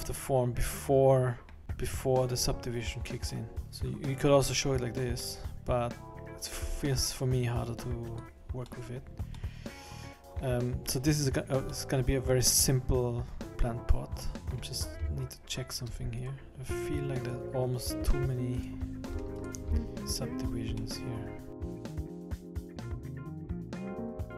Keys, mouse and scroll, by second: 1.6 middle click, 3.3 middle click, 3.6 middle click, 4.3 click, 5.2 middle click, 6.6-6.9 scroll up 2, 8.1 click, 8.7 middle click, 9.1 scroll down 3, 9.3 middle click, 9.8 middle click, 12.0 middle click, 13.4 middle click, 13.4-13.8 scroll up 2, 15.2 ctrl+right click, 16.2-16.5 shift+right click, 19.4 ctrl+right click, 20.0 ctrl+right click, 20.4-20.7 scroll down 3, 20.7 middle click, 21.6 scroll down 1, 21.8 ctrl+z, 21.8 Escape, 22.5 ctrl+r, 22.9 ctrl+r, 23.1 ctrl+r, 23.2 middle click, 23.3 Tab, 23.3 Tab, 23.3 middle click, 23.5 middle click, 23.5 click, 23.5 scroll down 2, 23.9 click, 23.9 middle click, 24.1 click, 24.3 click.